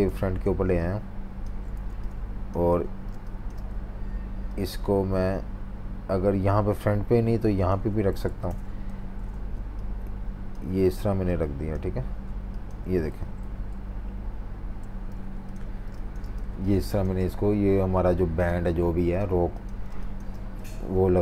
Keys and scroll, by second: 0.4 v, 1.8-3.7 typing, 8.8 shift+super+v, 13.1 Left, 13.4 Left, 14.2 Down, 14.2 Down, 14.3 Down, 15.1-17.9 typing, 19.7 v, 19.9 space, 20.8 super+3.